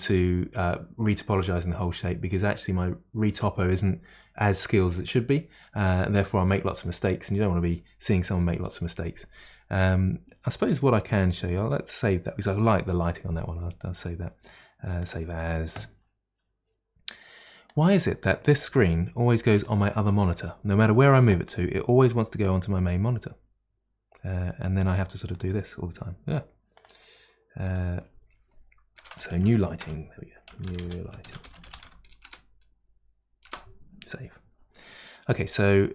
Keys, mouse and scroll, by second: 11.6-15.3 drag.